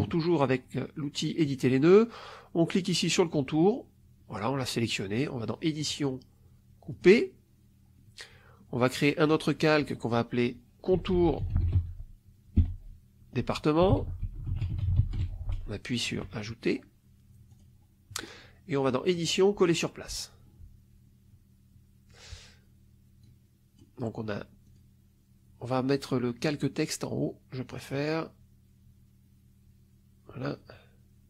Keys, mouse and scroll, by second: 1.4 click, 3.0 click, 5.7 click, 6.8 click, 9.1 click, 10.6-12.2 typing, 13.5-15.6 typing, 17.4 click, 19.1 click, 20.0 click, 23.1 click, 24.6 click, 27.6 click.